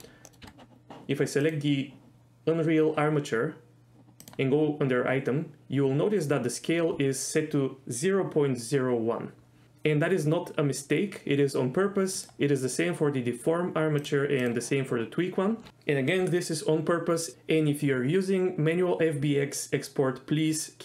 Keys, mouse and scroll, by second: 0.2 middle click, 0.4 middle click, 0.5 Tab, 1.7 click, 4.5 click, 12.4 click, 14.6 click.